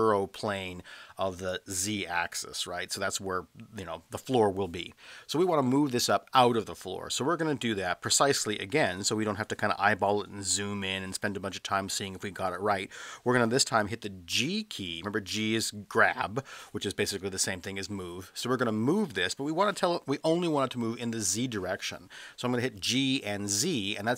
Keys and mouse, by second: 14.9 g, 21.2 z.